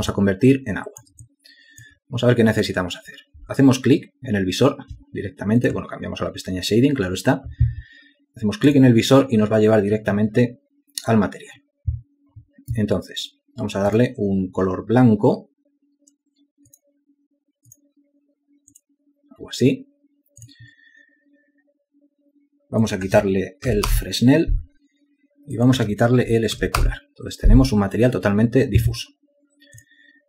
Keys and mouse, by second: 0.2 alt+shift+click, 1.3 alt+click, 24.0 Return, 27.0 Return.